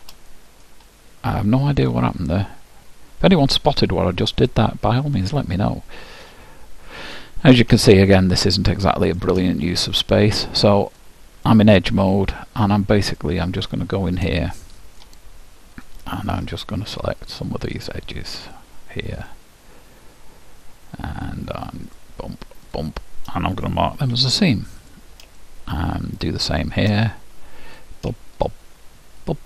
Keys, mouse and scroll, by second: 7.8-10.9 middle drag, 10.9-12.7 drag, 13.1-14.9 drag, 13.8-16.0 middle drag, 15.8-21.3 drag, 21.9-24.7 drag, 24.1 ctrl+e, 27.1 middle click, 27.7-29.4 drag.